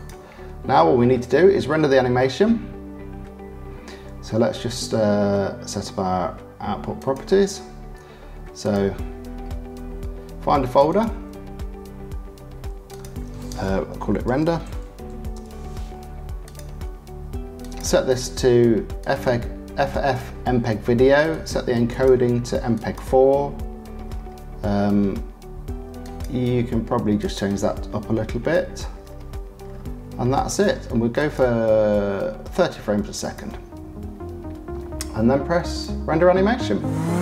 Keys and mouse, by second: 7.0 click, 8.6 click, 17.5-19.2 drag, 21.3 click, 22.0 click, 26.1-27.3 drag, 27.3-31.2 middle drag, 31.2-33.4 drag, 33.4-35.7 middle drag, 35.7-37.2 drag.